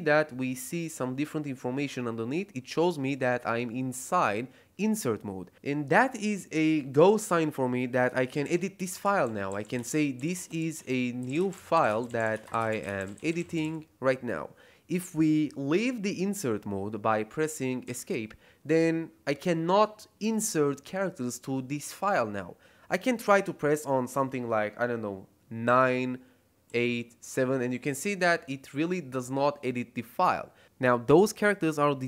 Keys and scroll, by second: 8.0-14.1 typing, 17.8 Escape.